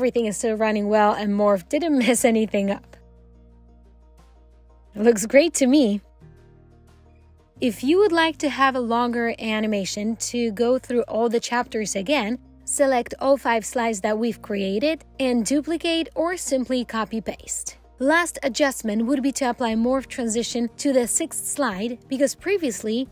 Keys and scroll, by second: 15.7 ctrl+d.